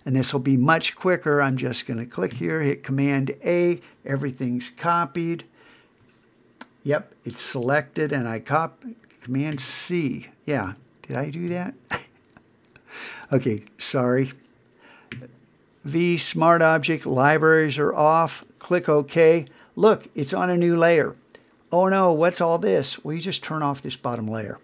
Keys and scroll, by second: 2.3 super+a, 9.5 super+c, 10.6 super+Tab, 15.1 super+v.